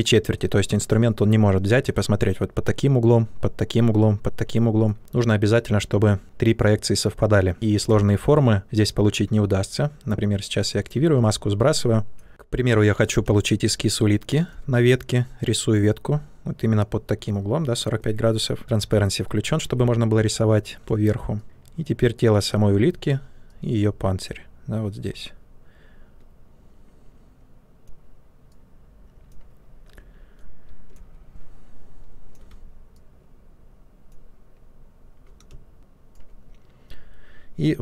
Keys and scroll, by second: 7.9 ctrl+z, 13.2 space, 20.8 space, 21.4 ctrl+z, 35.4 space.